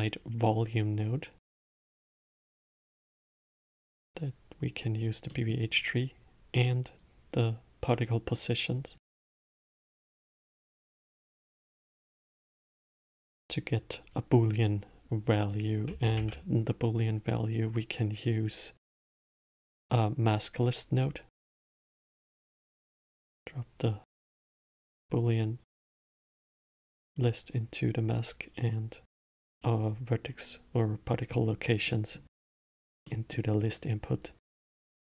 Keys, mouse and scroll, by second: 2.1 click, 3.5 click, 5.6-7.3 middle drag, 7.3 click, 9.3 middle click, 10.1 click, 11.0-12.3 drag, 12.3-14.0 middle drag, 14.0 click, 22.4 click, 26.6 click, 31.2 click, 32.2-33.0 middle drag, 33.0-33.4 scroll up 1, 33.4-35.0 middle drag.